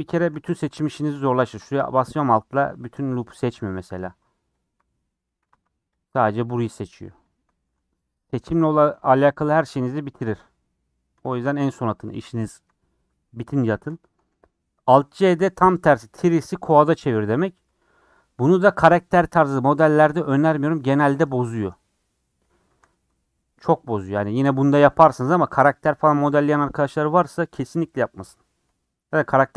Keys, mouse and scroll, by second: 0.5 3, 1.4 alt+click, 2.3-4.6 middle drag, 4.6 alt+Left, 5.0 middle click, 5.4 3, 6.0 alt+Left, 7.3 alt+Left, 7.8-11.1 middle drag, 11.1 scroll down 2, 11.3-13.4 shift+middle drag, 13.4 scroll up 2, 13.7 shift+middle click, 14.4 scroll down 1, 22.7 a, 27.9 alt+j.